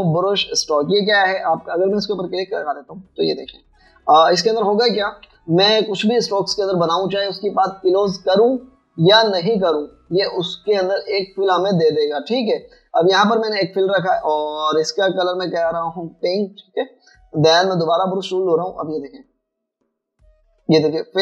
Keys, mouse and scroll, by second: 4.6 v, 6.3 v, 13.8 double click, 19.5 alt+scroll up 1.